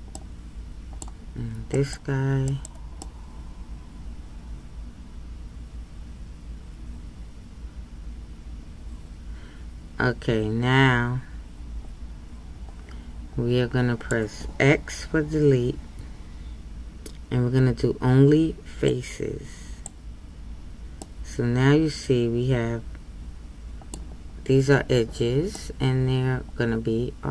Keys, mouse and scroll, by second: 0.2-1.7 middle drag, 1.7 c, 3.1-6.1 middle drag, 19.8-21.0 drag, 21.0-24.0 middle drag, 25.5-27.3 middle drag.